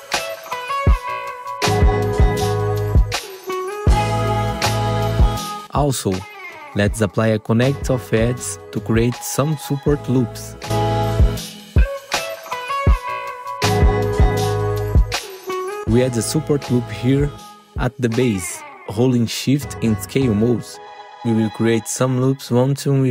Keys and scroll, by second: 2.7 F4, 5.7 2, 5.9 F4, 6.4 2, 6.8 F4, 7.0 2, 7.2 F4, 8.5 ctrl+r, 13.0 2, 13.2 F4, 14.7 F4, 15.7 alt+1, 17.1 F4, 18.5 F4, 19.0 r, 20.3 4.